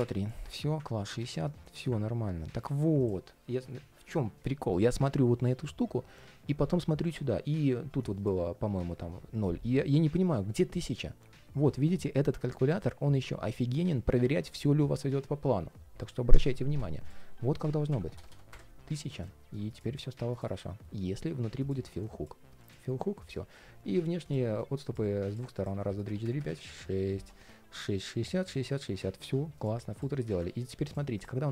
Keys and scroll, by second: 30.4 super+s.